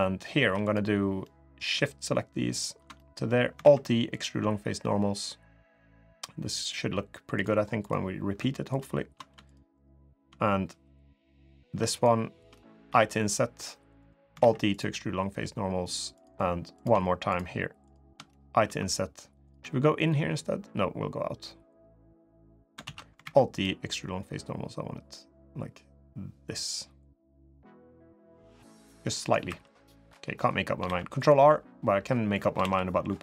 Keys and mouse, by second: 0.2 3, 0.4 click, 1.0 middle click, 2.3 ctrl+shift+click, 2.7 middle click, 3.4 alt+e, 7.6 click, 8.5 ctrl+shift+click, 9.2 shift+click, 9.5 shift+click, 11.7 shift+click, 12.6 i, 14.2 alt+e, 17.0 shift+click, 17.6 shift+click, 18.4 i, 19.4 e, 22.6 ctrl+z, 23.0 alt+e, 29.2 3, 29.7 click, 30.6 ctrl+r, 32.4 ctrl+r.